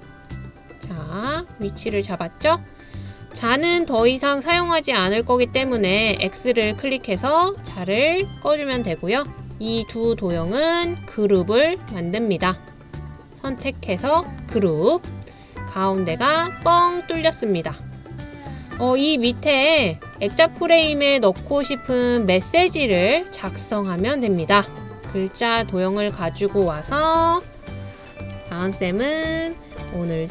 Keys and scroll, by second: 0.0-0.4 typing, 1.5-4.3 typing, 26.5-27.7 typing, 28.9-30.3 typing.